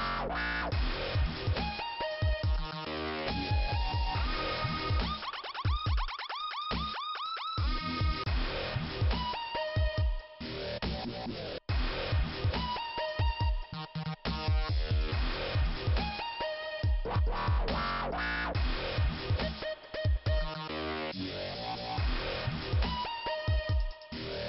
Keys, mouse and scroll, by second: 1.1 click, 3.3 click, 3.4 click, 4.0 click, 10.4 click, 11.0 click, 15.4 click, 16.9 click, 18.5 click, 18.6 click, 19.8 click, 19.9 click, 19.9 click, 20.6 click, 22.7 click.